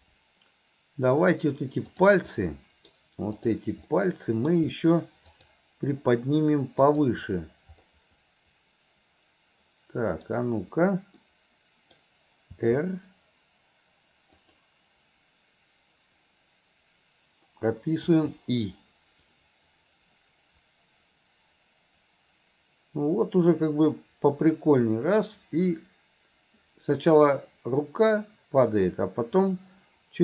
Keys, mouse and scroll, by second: 2.4 middle click, 3.4 click, 5.3 click, 6.9 click, 11.2 middle click, 19.4-30.2 drag.